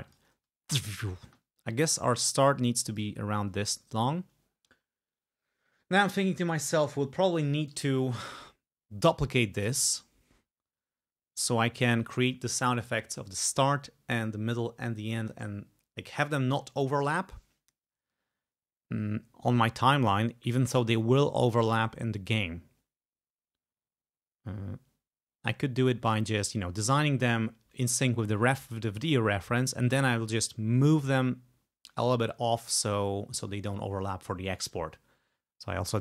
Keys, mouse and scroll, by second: 0.1 ctrl+click, 0.4 ctrl+space, 1.3 space, 1.6-3.3 drag, 3.3-3.8 ctrl+scroll down 4, 29.1 click.